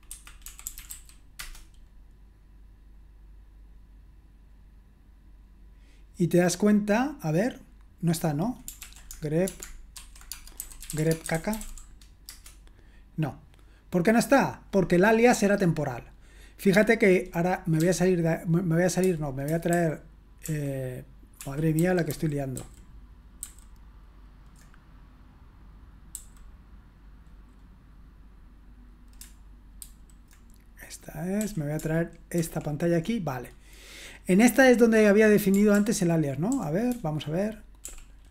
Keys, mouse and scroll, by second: 0.0-1.4 typing, 8.8 ctrl+p, 9.5-12.3 typing, 17.8 typing, 19.8 super+h, 20.5 super+l, 21.4 super+l, 26.1 super+h, 29.8 shift+super+h, 31.4 super+l, 32.4 shift+super+l, 35.8 ctrl+p, 36.5 ctrl+k, 36.9 ctrl+p, 37.8 l.